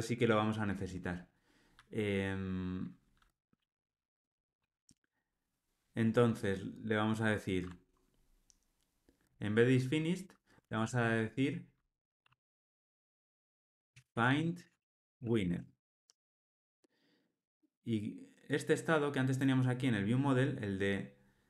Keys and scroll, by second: 9.3 super+b.